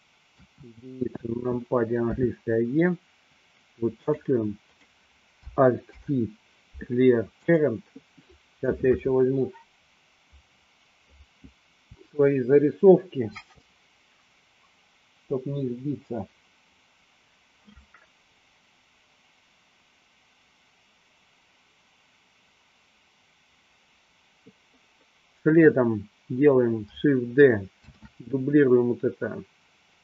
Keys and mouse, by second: 0.4 KP_1, 2.2 e, 4.3 click, 4.8 click, 6.2 alt+p, 28.0 shift+d.